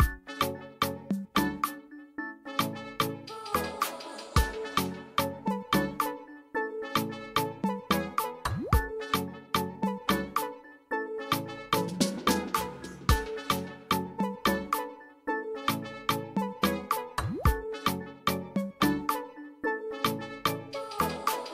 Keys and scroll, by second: 8.6 Escape.